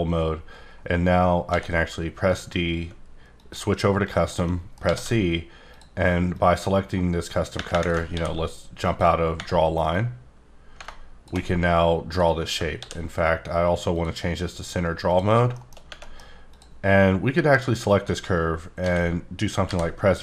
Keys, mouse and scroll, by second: 1.4 d, 3.3 click, 5.2 scroll up 2, 5.7 click, 6.3 click, 8.1 ctrl+d, 8.9 click, 9.9 click, 12.8 ctrl+d, 13.9 click, 15.1 click, 15.3 scroll down 1, 15.5 middle click, 16.0 middle click, 16.5 click, 17.5 click, 18.7 a, 19.6 v.